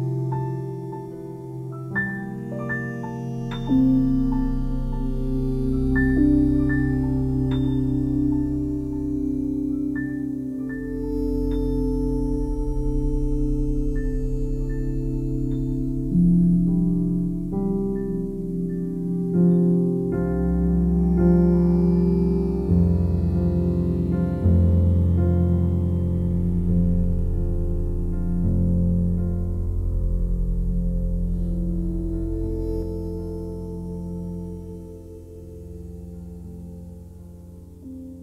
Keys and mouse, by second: 0.9 g, 1.3 Escape, 2.2 e, 3.3 click, 7.4 g, 7.5 g, 8.1 Escape, 9.0 ctrl+z, 11.0 g, 11.4 Escape, 12.2 e, 14.1-15.1 drag, 14.9 e, 16.1-22.1 drag, 22.4 s, 24.8 y, 26.0 click, 26.4-28.4 alt+drag, 29.0 1, 29.8 ctrl+alt+click, 30.3 alt+shift+click, 30.8-33.1 alt+drag, 33.3 ctrl+z, 35.9 click, 37.1 ctrl+click, 37.3 ctrl+click.